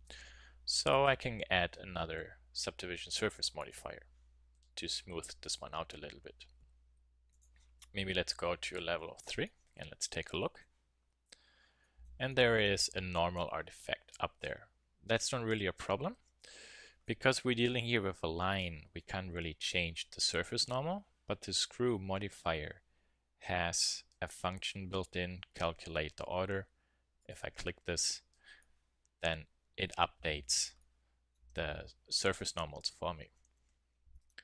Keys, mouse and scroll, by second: 0.4 middle click, 0.9-2.8 drag, 2.8 middle click, 5.4 click, 7.2 middle click, 7.3-9.0 drag, 9.1 middle click, 9.4-10.5 middle drag, 11.3 middle click, 11.8 middle drag, 16.1 Tab, 27.2-28.6 drag, 29.0 middle click, 29.8 KP_1, 33.5 Tab, 34.1 Tab.